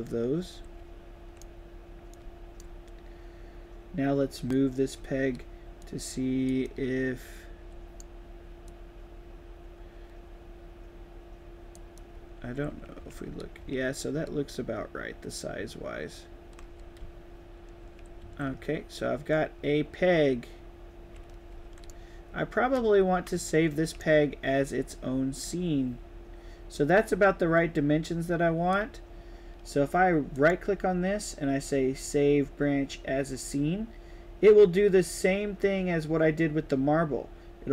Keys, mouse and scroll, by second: 0.4 right click, 0.7 a, 2.1 right click, 2.1 d, 4.4 click, 4.9 d, 5.8-6.4 drag, 6.7-7.9 right drag, 6.7 d, 8.6-9.2 drag, 11.9-14.1 typing, 12.0 right click, 15.7-19.9 typing, 16.7 right click, 20.0-21.9 right drag, 21.5 d, 22.5-23.5 typing, 22.7 right click, 23.3 right click, 23.5 right click, 23.8 click, 25.4-28.6 drag, 30.3 click.